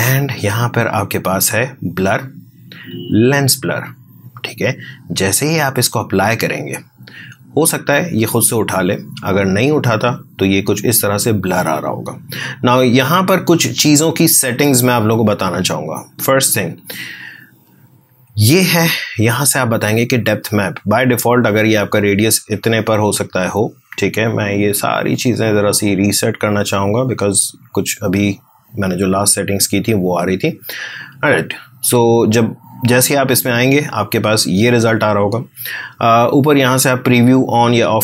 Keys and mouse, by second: 4.4-8.1 drag, 16.0-20.3 drag, 21.7-24.4 drag, 27.3-36.5 drag.